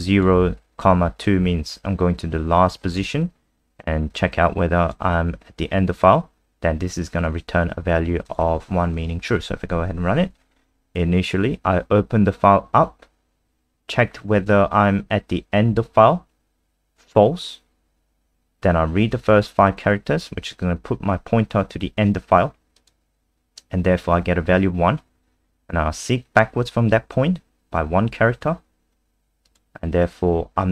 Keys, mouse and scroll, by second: 8.6 scroll up 1, 8.9 click, 9.4 F5, 22.8 click.